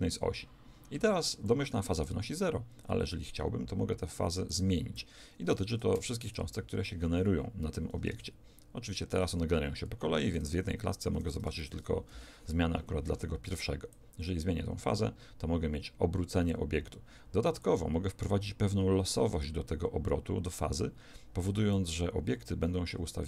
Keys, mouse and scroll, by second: 4.5 click, 8.1 alt+a, 10.3 alt+a, 12.0 shift+Left, 13.9-16.5 drag, 17.6-20.3 drag.